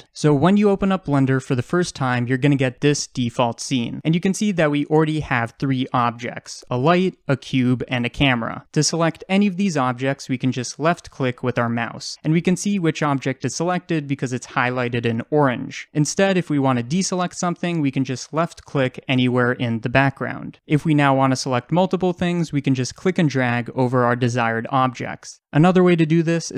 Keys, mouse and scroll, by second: 10.7 click, 13.0 click, 15.3 click, 18.2 click, 23.0 click, 24.2-26.5 drag.